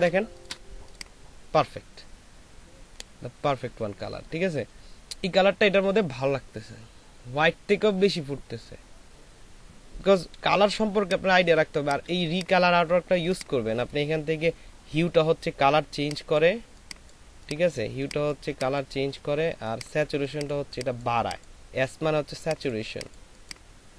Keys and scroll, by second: 10.7 ctrl+space.